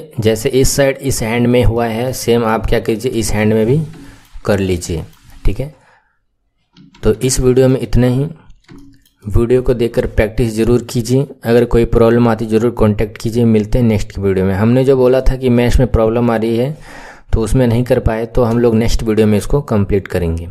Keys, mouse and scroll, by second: 0.4-1.2 scroll up 3, 1.2-1.6 scroll down 2, 1.6 right click, 1.6 shift+middle click, 2.5-3.6 right drag, 2.5 shift+middle click, 3.6-4.0 scroll up 4, 4.0-5.2 right drag, 4.0 shift+middle click, 5.2-6.6 scroll up 5, 6.6 KP_1, 6.8-7.2 scroll down 2, 7.2-7.8 shift+middle drag, 7.8-8.6 scroll down 2, 8.6-12.1 shift+middle drag, 16.0-17.9 scroll up 2, 18.0-18.6 scroll down 1, 18.6-20.5 shift+middle drag.